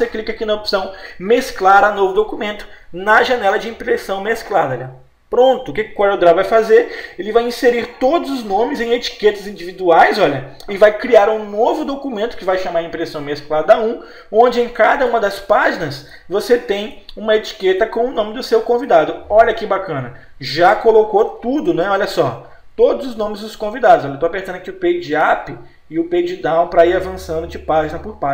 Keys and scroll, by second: 21.3 Num_Lock, 21.7 Page_Down, 23.1 Escape, 23.7 Page_Up, 27.2 Page_Down.